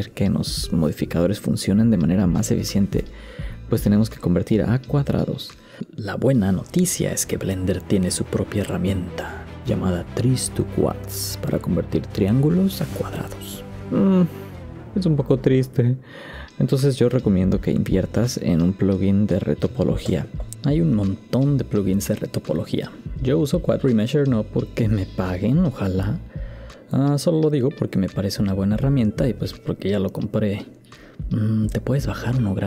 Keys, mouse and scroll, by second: 6.1 shift+middle click, 7.8 Tab.